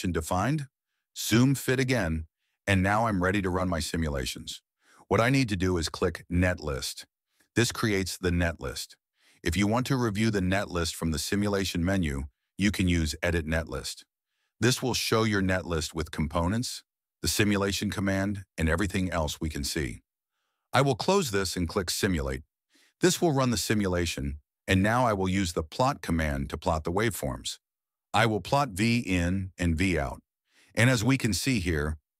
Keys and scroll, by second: 28.3-31.8 typing.